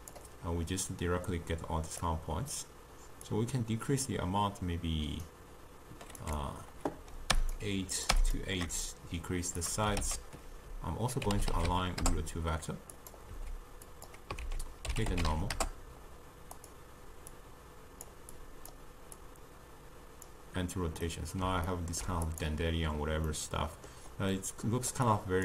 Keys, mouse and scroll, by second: 8.0 click, 8.8-10.1 shift+drag, 10.1 ctrl+a, 13.9 click, 14.5 ctrl+a, 17.4-18.5 drag, 19.2-21.1 drag, 21.1-22.3 middle drag, 22.3 click, 23.4-25.2 middle drag, 25.2 click.